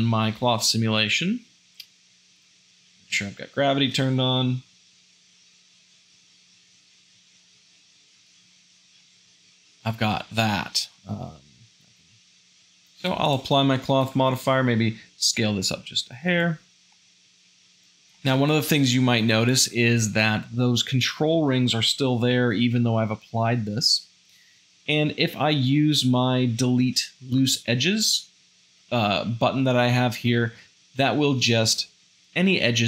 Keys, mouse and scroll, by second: 3.0 shift+Left, 8.4 space, 12.5 space, 15.4 s, 16.9 g, 17.9 shift+z, 18.1 shift+middle click.